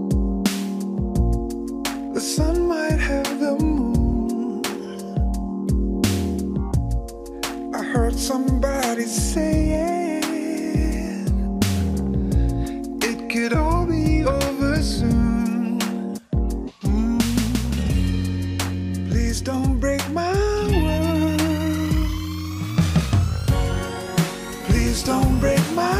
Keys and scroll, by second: 11.7 ctrl+t, 17.1 Tab, 19.8 Tab, 20.4 Tab, 21.0 alt+Return, 22.2 Return.